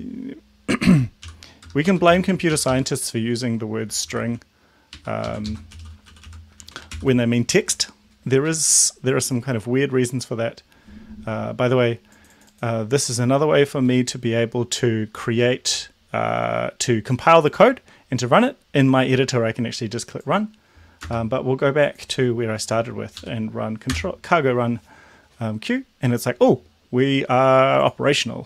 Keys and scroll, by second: 1.3 ;, 1.6 BackSpace, 1.8 Right, 2.0 ;, 2.6 shift+Left, 3.6-6.7 typing, 5.0 Right, 5.2 Left, 6.9 ctrl+s, 21.2 space, 23.2 Up, 23.8 Return.